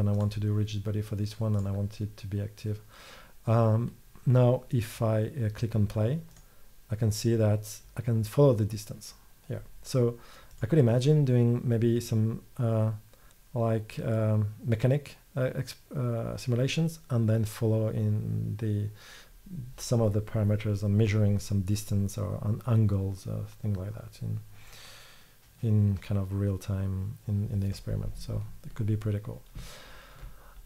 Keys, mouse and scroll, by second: 0.2 middle click, 1.6-2.8 middle drag, 6.4-8.3 drag, 13.2 click, 28.5-30.6 middle drag.